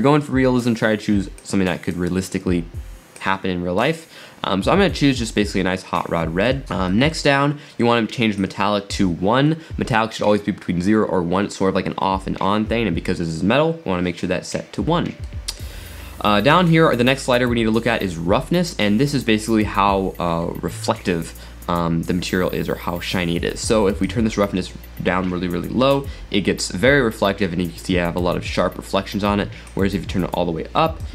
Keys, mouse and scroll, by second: 5.9-8.4 middle drag, 8.4-11.8 drag, 15.3-18.3 middle drag, 24.1-27.5 drag, 29.7-31.1 drag.